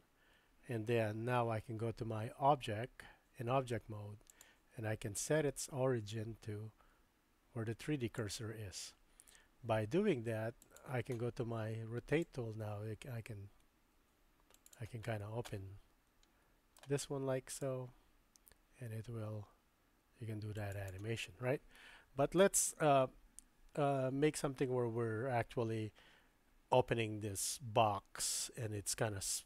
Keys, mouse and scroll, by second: 1.4 Tab, 4.3-8.4 drag, 10.7 click, 12.3-14.7 drag, 15.5-16.8 middle drag, 17.6-20.9 drag.